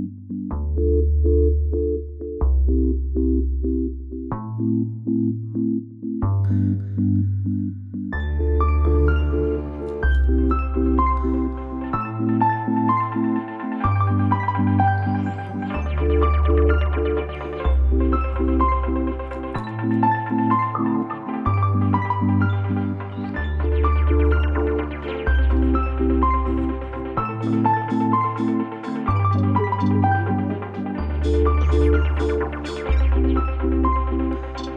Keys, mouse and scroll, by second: 1.0-3.4 drag, 3.4 right click, 4.9 click, 6.1 alt+scroll up 1, 6.8 alt+scroll up 1, 9.3-15.7 drag, 15.7 space, 16.1 click, 16.8 space, 19.3-29.3 drag.